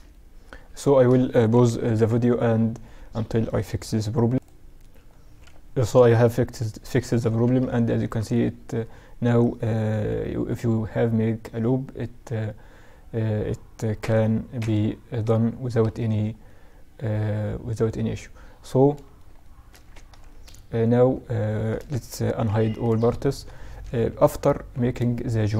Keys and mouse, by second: 0.8 KP_Subtract, 3.4-6.3 middle drag, 6.3 Tab, 6.9 ctrl+r, 15.4-17.3 middle drag, 18.4-21.3 middle drag, 18.9 Tab, 21.3 alt+h, 22.1-24.4 middle drag, 23.1 KP_Subtract, 25.1-25.5 middle drag.